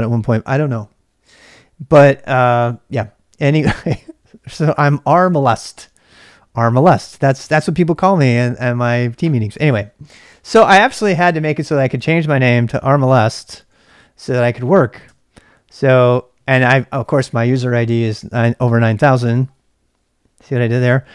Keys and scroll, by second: 9.5-10.2 BackSpace, 12.2-14.1 typing, 15.0 Return.